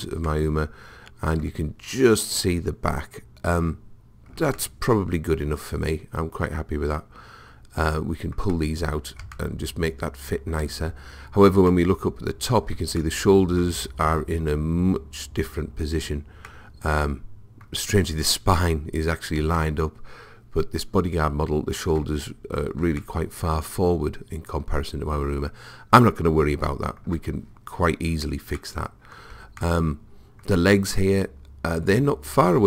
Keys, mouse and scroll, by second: 4.6-6.5 middle drag, 9.4-14.8 middle drag, 11.1-11.7 scroll down 1, 16.5-18.4 middle drag, 19.6-21.4 middle drag, 23.0-24.9 middle drag, 28.6-30.1 middle drag, 30.2-32.6 middle drag.